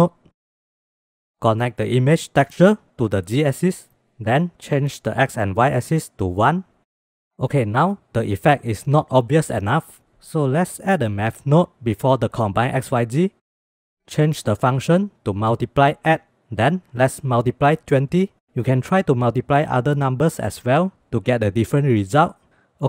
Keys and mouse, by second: 0.0 click, 0.4 click, 1.1 click, 2.3-3.3 drag, 4.3-6.0 drag, 7.0 middle click, 10.8 shift+a, 14.7-15.9 drag, 17.0-18.8 drag, 21.1-22.0 middle drag, 22.0 shift+click, 22.1 shift+middle click.